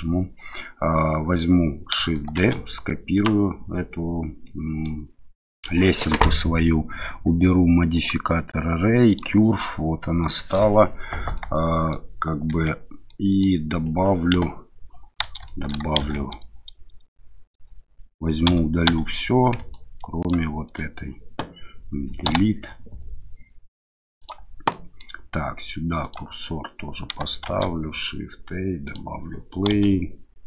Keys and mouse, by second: 1.3 click, 2.4 shift+d, 3.1 click, 4.4-4.9 middle drag, 7.9 click, 9.1-10.5 drag, 11.3 click, 12.5 Tab, 13.1 click, 14.3 KP_1, 15.4 shift+click, 16.0 shift+z, 18.5 a, 18.9 a, 19.8 ctrl+click, 22.2 Delete, 24.7 middle click, 27.4 shift+a, 29.7 s.